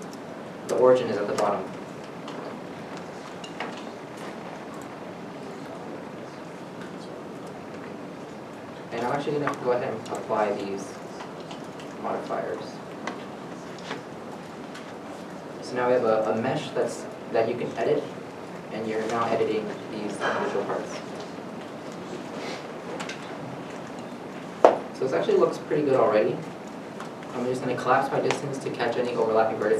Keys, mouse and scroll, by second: 1.7 shift+middle click, 2.6 shift+middle click, 2.7 scroll down 1, 3.7 7, 4.8 g, 5.9 z, 6.4 middle click, 6.7 Tab, 7.8-8.2 scroll down 1, 9.0-9.8 scroll up 1, 15.2 scroll up 1, 15.2 middle click, 16.9 Tab, 17.5 middle click, 18.0-18.4 scroll up 1, 19.0 scroll up 1, 20.7 g, 21.5 middle click, 25.3 a, 26.8 alt+m.